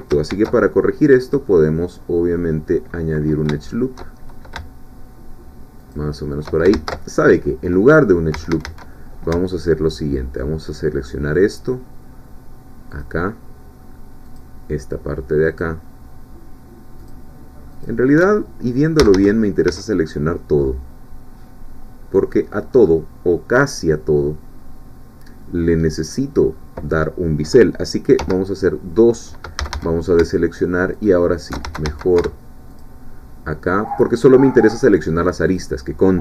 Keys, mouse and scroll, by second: 0.3 ctrl+r, 1.2 click, 5.8 shift+click, 6.7 ctrl+shift+z, 7.9 scroll down 2, 8.3 a, 10.7 alt+shift+click, 13.0 alt+shift+click, 14.3 alt+shift+click, 15.6 alt+shift+click, 17.0 alt+shift+click, 17.8 alt+shift+click, 19.0 a, 20.1-22.5 middle drag, 22.7 scroll up 2, 23.5 scroll down 2, 28.2 2, 29.6 a, 30.2 alt+shift+a, 31.0 alt+shift+click, 31.6 alt+shift+a, 32.8-34.2 alt+shift+drag, 35.5 alt+shift+click.